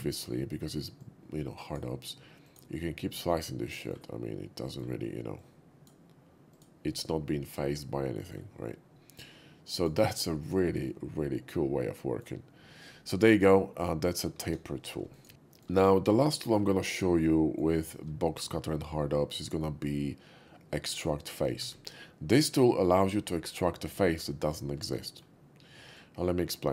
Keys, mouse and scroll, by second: 0.1 shift+middle click, 0.9-1.8 shift+drag, 2.5 shift+click, 3.0-3.9 middle drag, 4.6 middle click, 5.2-5.9 drag, 6.5 click, 6.9-8.3 middle drag, 9.2-9.9 drag, 10.4 click, 10.9-12.2 middle drag, 14.2 KP_5, 15.1 click, 15.1 KP_5, 15.3 shift+middle click, 16.2-16.5 shift+middle drag, 16.8 shift+middle drag, 17.3 shift+middle click, 21.5 shift+a, 22.7 click, 24.9 middle click, 25.8-26.7 drag.